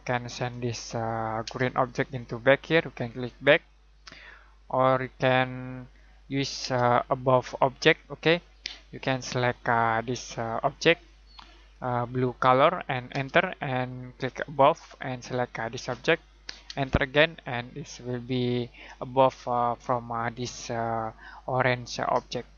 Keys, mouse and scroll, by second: 0.3 click, 1.4 space, 3.5 click, 6.6 space, 10.7 click, 13.1 space, 14.5 click, 16.6 space.